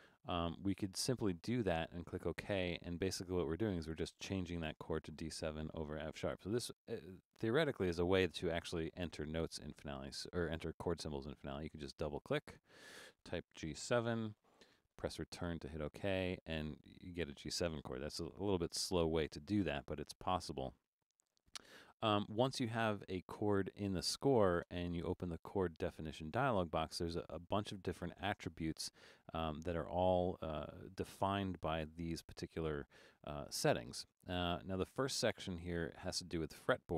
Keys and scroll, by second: 13.7-14.0 typing, 15.4 Return, 24.7 Return.